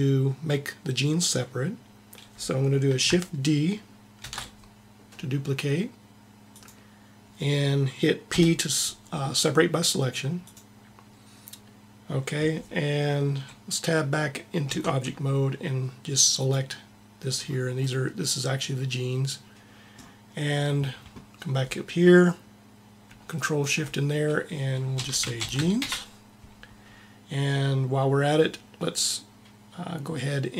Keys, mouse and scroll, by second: 4.1 shift+d, 6.6-8.2 drag, 8.1 p, 14.6 Tab, 16.3-19.4 drag, 23.1-24.9 drag.